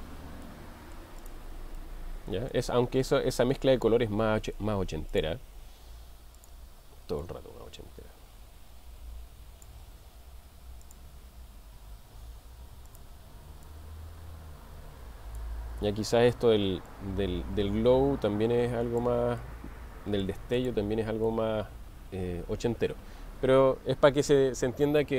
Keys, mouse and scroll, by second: 0.4-1.1 middle drag, 1.3 click, 1.8-2.8 middle drag, 6.4 click, 17.0-19.0 drag, 19.4-20.5 middle drag, 20.6 click, 21.3-23.9 middle drag.